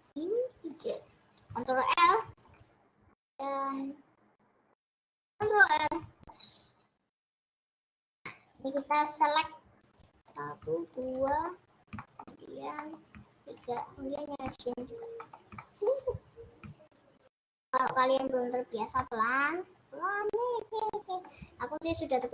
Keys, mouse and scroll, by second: 1.2-2.0 scroll up 3, 2.0 ctrl+r, 6.0 ctrl+r, 8.6 click, 8.7-10.2 middle drag, 10.2 click, 11.4 middle click, 12.2-12.6 scroll up 3, 12.6 middle click, 13.4 shift+Left, 13.7-14.8 middle drag, 14.8-15.3 scroll up 3, 15.3 shift+middle click, 16.0 scroll up 2, 17.4 shift+Left, 18.0 shift+Left, 18.6 shift+Left, 19.0-21.4 middle drag, 21.4-22.0 scroll down 8.